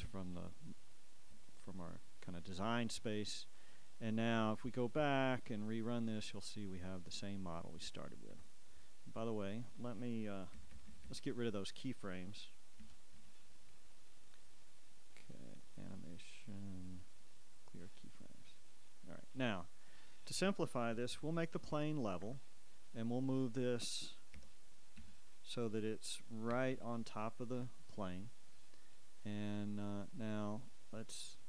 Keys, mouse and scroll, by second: 4.2-6.6 shift+drag, 6.6-11.4 shift+middle drag, 9.8 Escape, 11.4 shift+Left, 13.0 a, 15.3-16.3 drag, 17.8 click, 18.6 click, 20.1 right click, 21.7 alt+r, 22.4 alt+Escape, 23.4 right click, 24.7 g, 25.2 z, 26.5-27.5 typing, 27.8 Return, 30.2-31.4 drag.